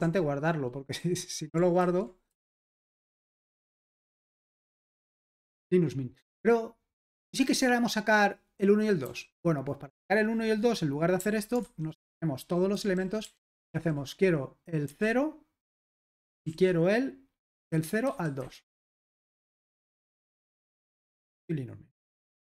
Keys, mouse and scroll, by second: 0.0 super+l, 1.8-2.3 typing, 2.5 Return, 3.0 super+h, 3.9 ctrl+p, 4.4 Return, 5.4 super+l, 9.0 typing, 11.4-14.9 typing, 16.5 shift+;, 18.2-19.6 typing, 19.6 super+h, 20.0 ctrl+p, 20.4 Return.